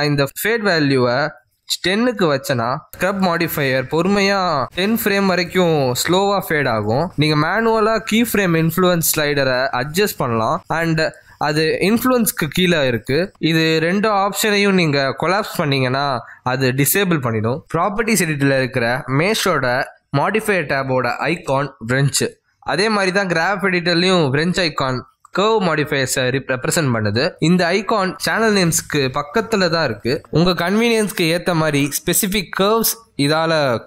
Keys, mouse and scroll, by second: 2.7 click, 6.0 click, 13.5 click, 14.0-14.6 scroll down 3, 14.9 click, 19.7 click, 20.9 click, 30.0 click, 31.6 click, 33.5 click.